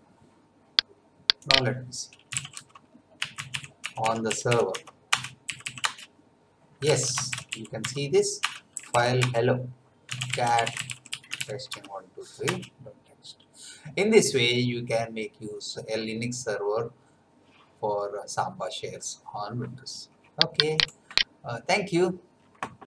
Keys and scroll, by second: 2.3-5.5 typing, 5.1 Return, 5.8 Return, 6.6-8.7 typing, 8.4 Return, 9.2 Return, 9.8-11.9 typing, 12.4 Return.